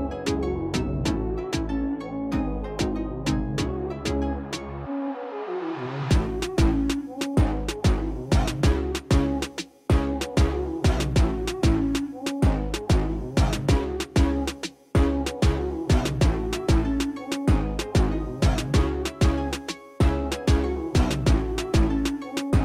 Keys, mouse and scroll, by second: 10.7 click, 11.7 super+click, 14.3 super+click, 15.9 super+click, 16.9 super+click, 19.2 super+click, 19.8 super+click.